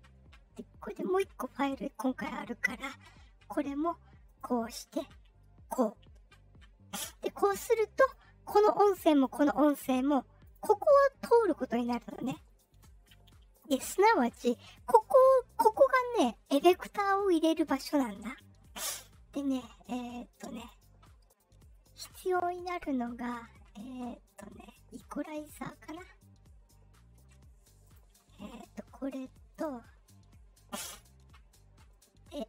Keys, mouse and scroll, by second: 0.8 click, 4.2 click, 5.6 click, 8.0 click, 9.0 click, 10.4 click, 12.1 click, 13.5 click, 20.5 click, 27.8 click, 29.5 click.